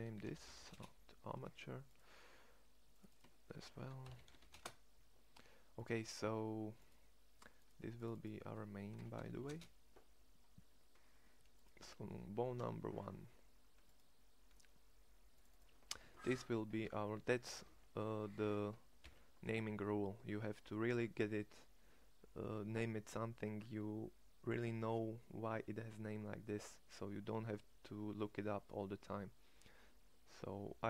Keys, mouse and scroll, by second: 12.6 Tab.